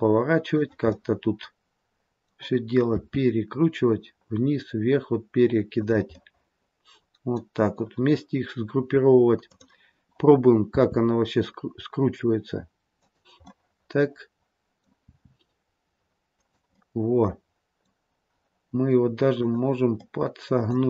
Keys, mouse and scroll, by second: 0.8 middle click, 2.9 r, 6.0 middle click, 9.4 click, 10.6 r, 13.4 middle click, 15.0 r, 16.7 middle click, 19.3 click, 19.9 middle click.